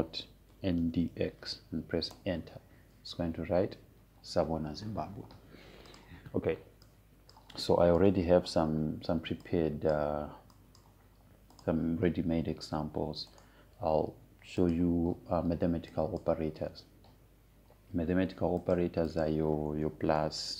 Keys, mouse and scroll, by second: 0.0-3.2 typing, 3.7 Return, 7.6 click, 9.7 BackSpace, 11.0 click, 13.2 click, 15.0 right click, 16.3 click, 20.3 click.